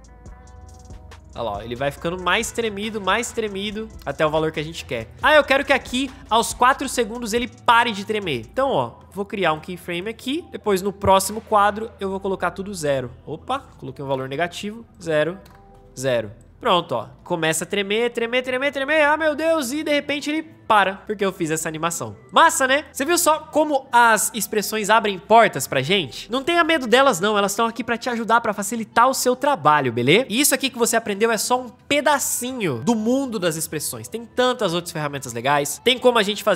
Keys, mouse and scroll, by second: 16.3 click, 16.9 space, 21.2 space.